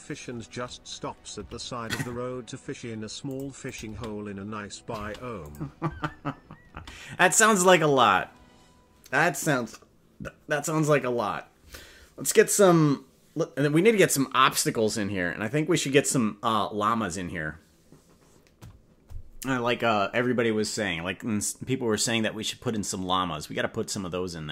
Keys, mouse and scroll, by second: 1.4 g, 3.6 click, 3.8 space, 5.0 space, 5.4 click, 5.8 space, 6.8 space.